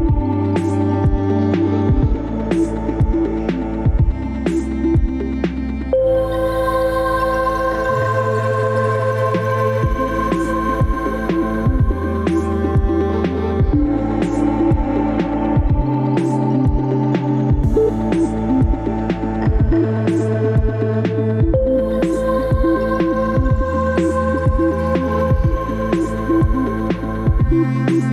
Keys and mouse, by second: 1.7-3.3 drag, 3.3 middle click, 4.1 Tab, 5.2 Tab, 6.1-8.1 middle drag, 10.9 click, 12.2-15.2 middle drag, 16.3 F4, 18.8 ctrl+r, 20.8 click, 22.3 middle click, 22.7 Tab, 23.3-24.0 middle drag.